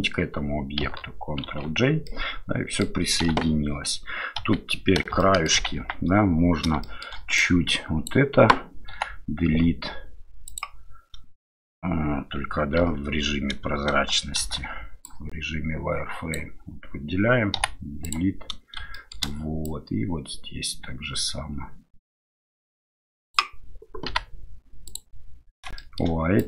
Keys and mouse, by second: 1.5 ctrl+j, 2.0-2.8 middle drag, 3.2 KP_7, 3.2 KP_8, 4.4 KP_7, 5.2 shift+middle drag, 5.8 Tab, 6.8 shift+click, 7.4-8.8 drag, 8.9 Delete, 12.9 ctrl+z, 14.4 shift+z, 15.8 click, 18.5 Delete, 18.9 shift+middle click, 19.7-25.7 drag, 25.7 shift+middle click.